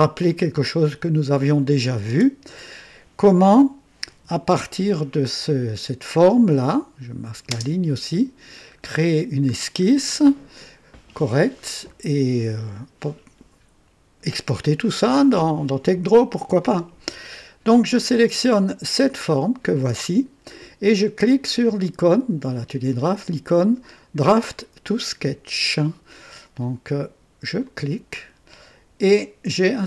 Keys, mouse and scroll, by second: 1.7 click, 2.0 space, 4.1 KP_2, 6.4 click, 6.8-7.6 typing, 8.7-9.0 scroll up 1, 9.5 scroll down 1, 9.9-10.9 right drag, 11.5 scroll down 1, 17.8 click, 27.6 click, 29.7 scroll down 2.